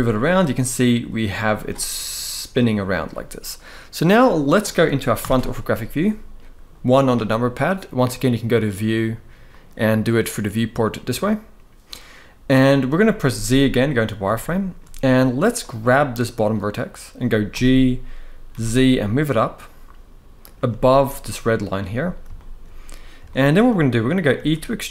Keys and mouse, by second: 1.2-2.2 right drag, 3.9 middle click, 4.9 KP_1, 7.8-8.6 drag, 9.2-11.5 drag, 13.0 z, 14.1-14.5 shift+middle drag, 15.4 click, 17.2 g, 18.2 z, 20.1 click, 20.4 z, 22.1 shift+middle click, 23.0 shift+middle click, 24.0 e.